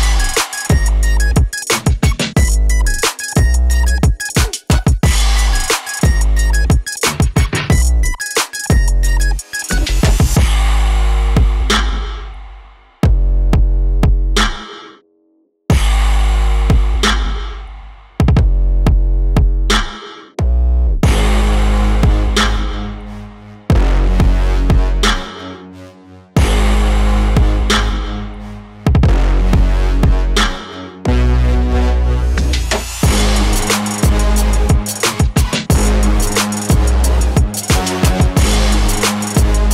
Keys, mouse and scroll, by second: 1.8 click, 2.9 shift+Right, 3.4 9, 3.8 Return, 6.9 click, 9.1-27.2 drag, 33.4-35.4 drag.